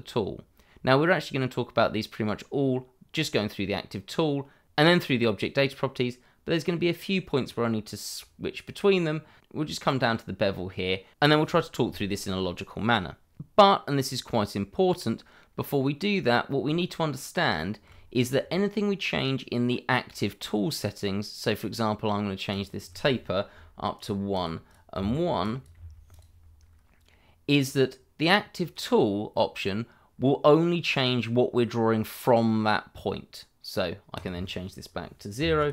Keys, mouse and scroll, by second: 7.4-8.2 scroll down 1, 16.7 shift+middle click, 22.5 click, 23.5 1, 23.9 click, 24.3 double click, 24.9 1, 25.4 click, 25.7 1, 26.1 click, 31.1-32.2 scroll down 1, 34.1 click, 35.3 0, 35.6 click.